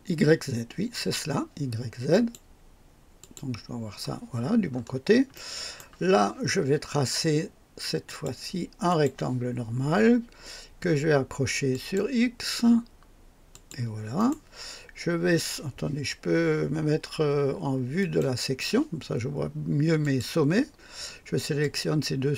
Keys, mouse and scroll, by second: 0.9 click, 2.1 click, 3.1 click, 4.6-5.0 scroll up 1, 5.3 right click, 8.0 click, 8.8 click, 11.7 click, 13.5 click, 14.1 right click, 18.0 click, 20.0 click, 21.5 click.